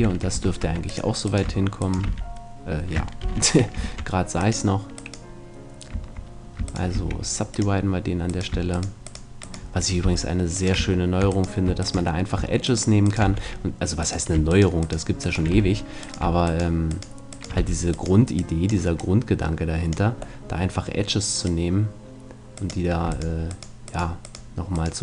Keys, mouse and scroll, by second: 0.4 ctrl+Tab, 2.1 f, 3.2 ctrl+z, 3.8 ctrl+Tab, 5.0 right click, 7.0 w, 10.0 f, 13.3 f, 15.6 f, 16.2-19.9 right drag, 17.6 f, 18.4-20.7 drag, 20.4 middle click, 21.4-23.3 drag, 23.1-25.0 right drag.